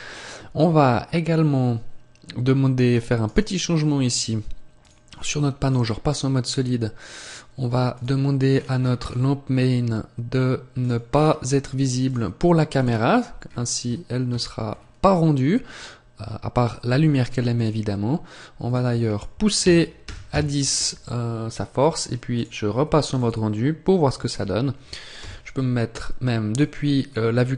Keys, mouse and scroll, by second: 3.1 right click, 4.7 click, 7.8 click, 8.3 scroll down 4, 9.9-10.5 scroll down 11, 10.7 click, 10.9-11.9 scroll down 4, 11.9 click, 11.9 scroll down 1, 12.7 click, 13.3-13.7 scroll up 1, 14.6-16.2 scroll up 15, 17.4 click, 22.2 click, 25.1 KP_0.